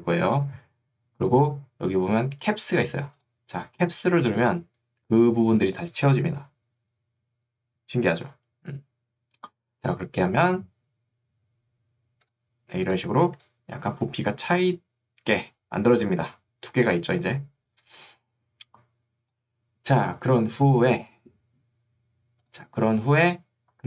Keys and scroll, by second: 13.5 3.